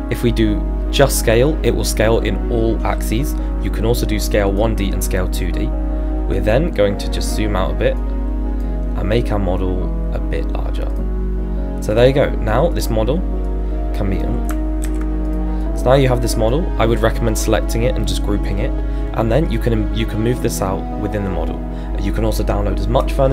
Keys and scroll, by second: 14.8 ctrl+z.